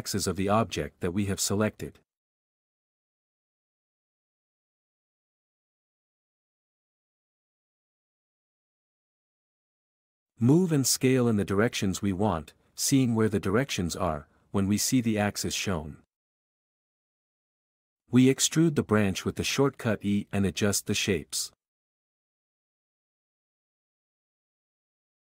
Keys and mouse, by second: 0.1 q, 1.0 q, 1.7 click, 3.7 q, 4.9 alt+click, 8.4 e, 9.5 z, 11.1 q, 11.9 q, 12.8 s, 13.0 x, 15.2 Escape, 19.6-22.7 typing, 23.1 Tab, 23.5 alt+a, 23.6 alt+z, 24.1 x, 24.4 alt+z, 24.8 Tab.